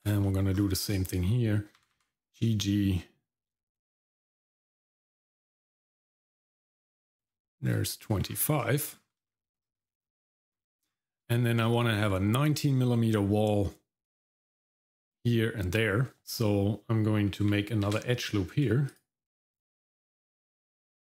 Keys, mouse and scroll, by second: 0.2 middle click, 0.5-1.8 scroll up 1, 1.8 scroll up 1, 1.8 g, 7.7-8.2 scroll down 1, 8.2-8.6 scroll down 2, 8.6 shift+middle click, 8.9 scroll down 1, 9.3 shift+middle click, 9.6 middle click, 10.0-10.3 scroll up 1, 10.3 middle click, 10.9-11.3 scroll down 2, 11.3 shift+middle click, 11.6 middle click, 11.9-12.3 scroll up 1, 17.9 ctrl+r.